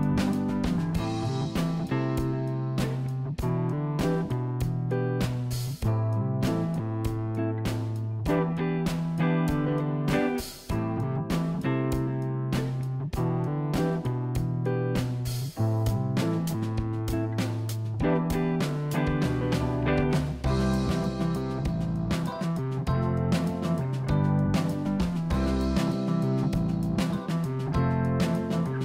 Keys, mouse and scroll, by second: 1.9-3.0 drag, 3.2-4.5 middle drag, 4.5-4.9 scroll down 2, 5.2-6.5 scroll up 1, 6.5 KP_1, 7.2 click, 8.7 g, 11.8 click, 18.4 click, 21.3-22.4 scroll up 3, 22.4-23.1 scroll down 1, 23.1 click, 23.7 click, 28.2 click, 28.6 click.